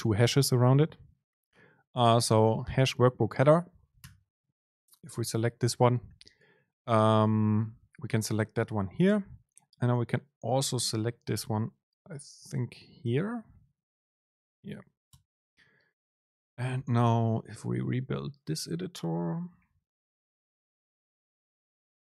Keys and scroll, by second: 13.1 super+space.